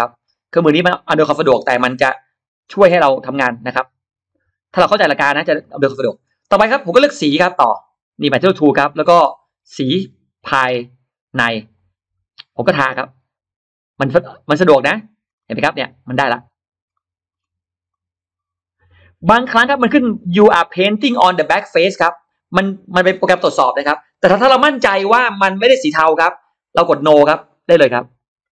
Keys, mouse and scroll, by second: 0.1 click, 0.6 click, 1.1 click, 1.4-1.7 scroll down 2, 1.7-2.0 scroll up 2, 2.0 click, 2.5 click, 3.0 click, 3.3-4.6 scroll down 2, 3.6-6.0 middle drag, 8.1 click, 11.5 click, 12.4-12.7 scroll up 1, 13.6 middle click, 14.7 click, 15.1-15.6 scroll up 1, 15.2 middle click, 16.2 click, 16.7-17.1 scroll up 1, 16.9 middle click, 17.7 click, 27.9 click.